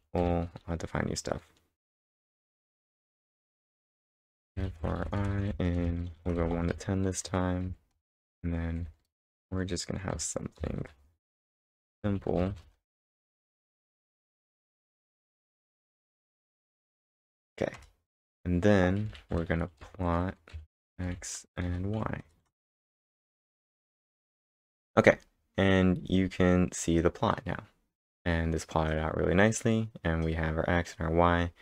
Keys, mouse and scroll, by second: 0.2 [, 2.1 [, 2.4 space, 4.0-7.2 typing, 7.6 End, 7.9 Return, 8.8-15.7 typing, 15.8 Right, 17.3 Return, 17.8 Return, 18.8-22.1 typing, 22.5 ctrl+Return, 23.9-24.8 typing, 24.5-26.0 scroll down 1.